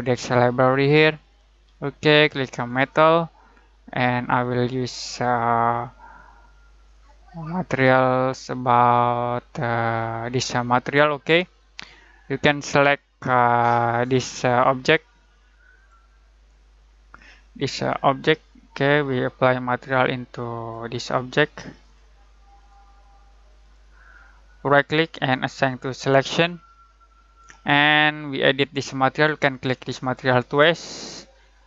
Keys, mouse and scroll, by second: 7.3-9.5 scroll down 1, 15.7 click, 18.0 click, 20.5 click, 24.6 right click, 25.6 click, 29.7-31.6 drag.